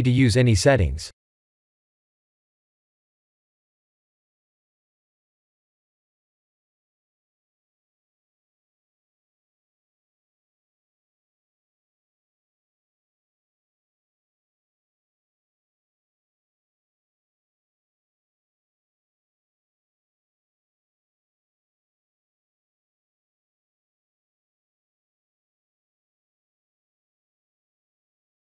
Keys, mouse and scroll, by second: 2.1 click, 5.8 click, 7.0 click, 9.4 click, 12.9 click, 19.4 shift+z, 20.6 middle click, 26.1 middle click.